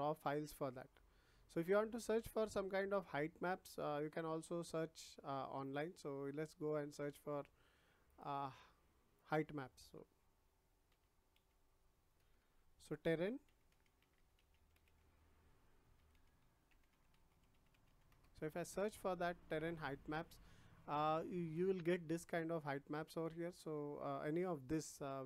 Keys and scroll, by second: 10.8 h, 11.3 e, 12.1 BackSpace, 13.4-14.9 typing, 15.9-17.8 typing, 18.0 Return.